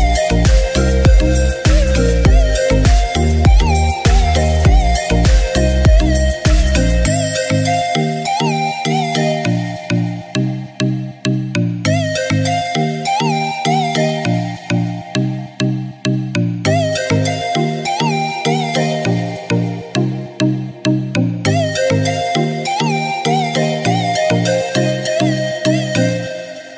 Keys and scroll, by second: 3.4-4.5 typing, 5.7 typing, 8.8-9.2 typing, 10.6-11.7 typing, 18.8 ], 20.2-22.1 typing, 23.3 typing.